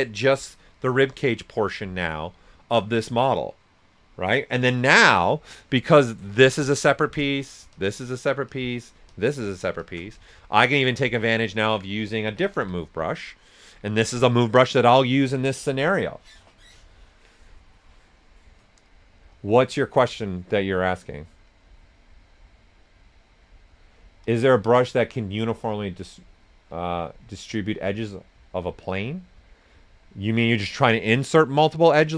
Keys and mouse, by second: 0.6 right click, 5.7 right click, 5.7 typing, 6.3 ctrl+shift+click, 10.2 right click, 10.6 right click, 11.4 alt+right click.